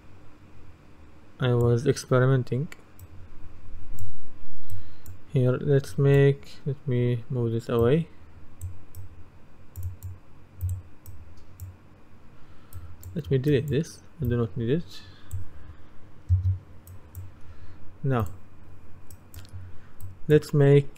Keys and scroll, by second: 16.4 Delete.